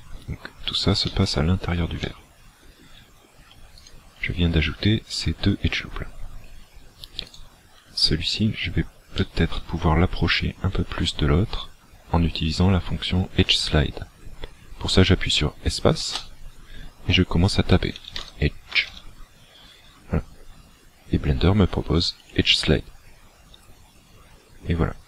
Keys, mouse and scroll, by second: 0.0 middle click, 2.1 middle click, 3.8 alt+shift+right click, 7.4 alt+right click, 8.4 scroll up 2, 9.2 shift+middle click, 9.8-10.2 scroll up 2, 16.0 space.